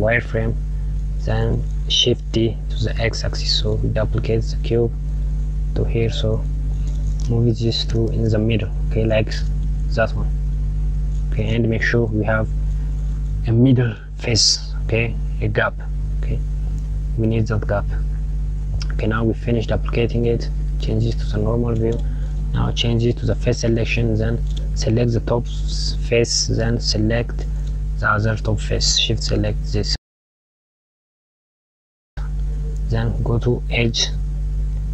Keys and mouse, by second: 0.5 click, 2.4 shift+d, 11.4 KP_Add, 18.2 click, 20.8 click, 23.7 click, 25.3 click, 29.4 shift+click, 33.1-34.9 drag.